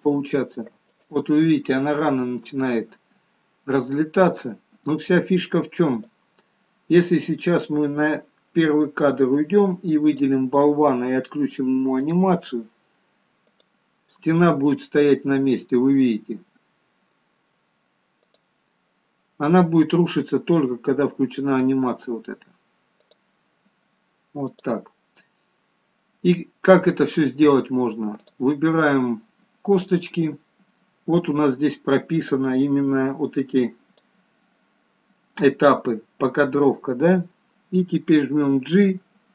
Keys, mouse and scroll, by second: 2.0 click.